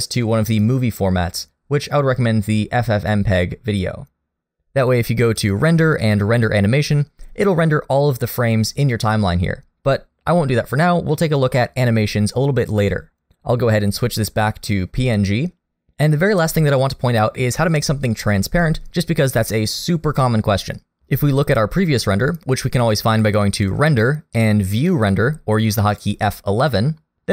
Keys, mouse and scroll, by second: 5.3 click, 13.4 click, 23.1 click.